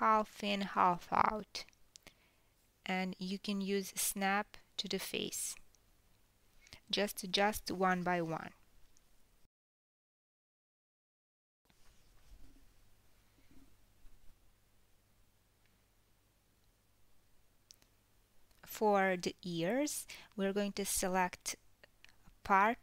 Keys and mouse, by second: 0.1 click, 0.8 g, 3.4 click, 3.7 g, 4.3-8.6 middle drag, 5.3 KP_1, 6.9 KP_3, 8.6 click, 8.6-10.9 middle drag, 9.5 g, 10.9 click, 11.1-16.3 middle drag, 11.3 g, 16.3 click, 16.5-19.7 middle drag, 19.7 click, 19.8-22.1 middle drag, 20.6 l, 22.1-22.8 drag.